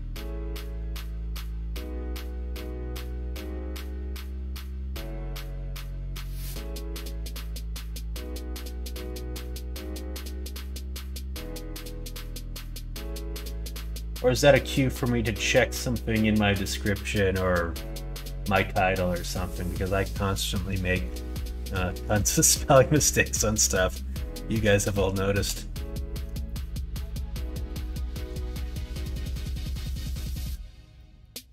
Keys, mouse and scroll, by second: 2.0 middle click, 3.6 click, 5.7 middle click, 6.1 middle click, 6.5 shift+middle click, 7.5 middle click, 8.0 shift+middle click, 8.6 middle click, 9.3 shift+middle click, 19.9 middle click, 20.3 middle click, 20.8 shift+middle click, 21.1 middle click, 21.7 shift+middle click, 22.2 middle click, 22.7 middle click, 23.2 shift+middle click, 23.6 middle click, 24.6 middle click, 25.1 shift+middle click, 26.3 shift+middle click, 27.3 middle click, 27.8 shift+middle click, 29.1 middle click, 30.9 middle click, 31.4 middle click.